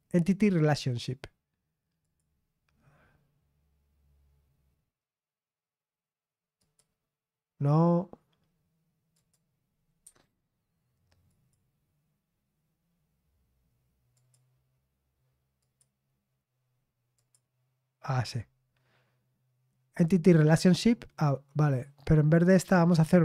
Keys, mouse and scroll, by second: 2.0 click, 6.5 click, 9.1 click, 9.1 right click, 10.0 Escape, 11.2 click, 14.1 click, 14.5 click, 15.5 click, 17.1 click, 19.8-21.0 scroll down 1, 21.0-23.2 scroll down 1.